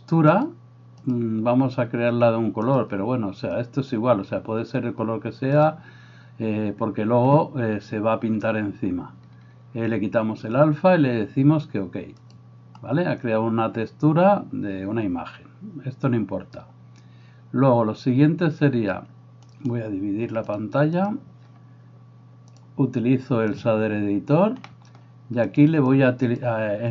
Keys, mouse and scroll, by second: 19.5-23.7 right drag, 22.7-23.7 drag, 23.8-25.7 drag, 23.8-26.9 right drag, 24.8-26.9 middle drag, 26.0-26.9 drag.